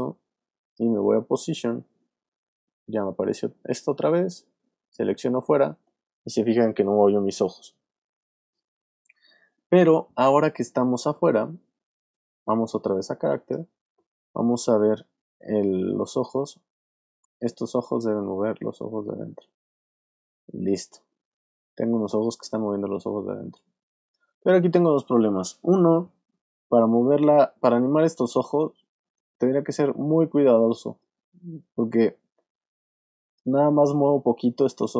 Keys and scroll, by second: 15.8 alt+space, 16.7 space, 24.5 super+z.